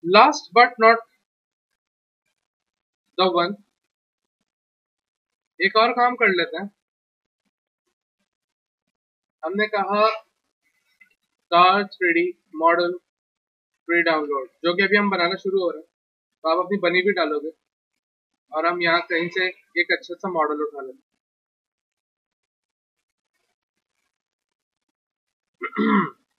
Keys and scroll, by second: 3.9 w, 5.6 z, 10.8-15.1 typing.